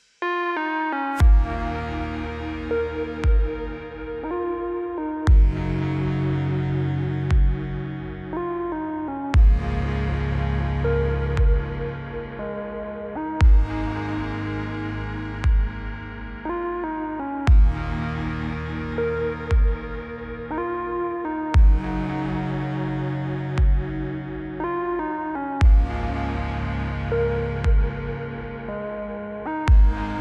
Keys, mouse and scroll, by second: 1.0 click, 2.6 click, 4.0-4.9 click, 6.1-6.8 scroll up 1, 7.8 right click, 11.0 click, 12.3 click, 17.3 click, 18.9-19.5 click, 21.4 click, 22.7 Return, 24.0-24.5 click, 25.7 click, 28.0-28.4 click, 28.8 c, 28.9 c, 29.1 space.